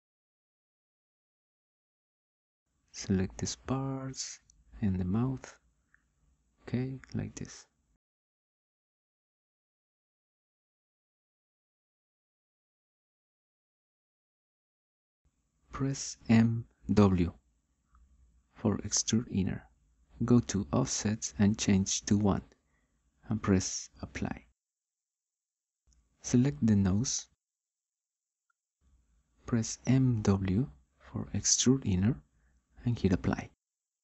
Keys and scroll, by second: 16.3 m, 17.2 w, 22.6 1, 27.9 9, 31.6 m, 32.5 w.